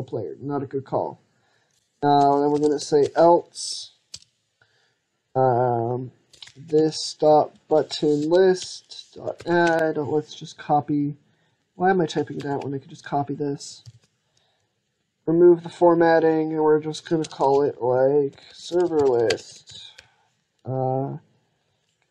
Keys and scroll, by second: 12.2 ctrl+c, 13.6 ctrl+v.